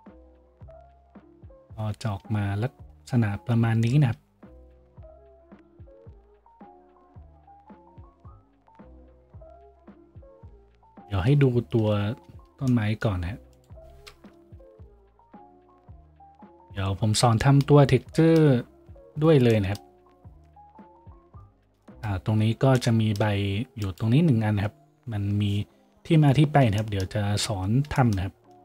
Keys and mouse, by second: 0.0 shift+z, 1.1 shift+z, 7.3 z, 8.9 z, 11.3 shift+z, 12.4 shift+z, 12.8-20.5 drag, 14.3 KP_Decimal, 15.0 a, 20.5-22.9 middle drag, 22.9-28.6 shift+drag, 25.3 a, 27.6 z.